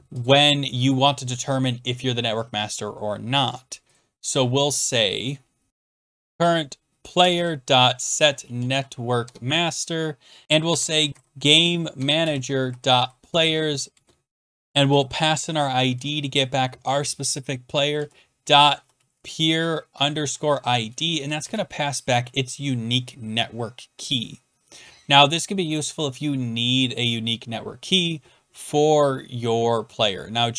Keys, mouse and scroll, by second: 0.2 click, 2.0 click, 3.9 click, 4.7-5.0 scroll down 2, 5.5-16.0 typing, 9.2 Tab, 10.4 click, 12.0 Tab, 17.7-21.1 typing, 21.4 Return.